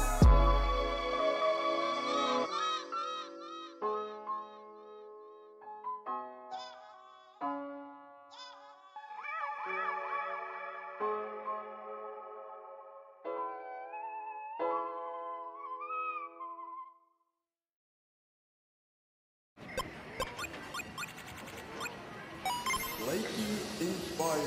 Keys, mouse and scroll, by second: 1.5-3.2 scroll down 2, 3.2 ctrl+s, 5.1 click, 6.9 click, 7.5 g, 7.8 click, 8.4 g, 10.6 click, 11.1 click, 11.5-11.9 scroll down 5, 12.7 click, 13.2-14.1 scroll down 7, 14.3 g, 16.3 KP_3, 17.3-19.1 scroll up 1, 19.1 click, 20.6 click, 21.6-24.4 drag.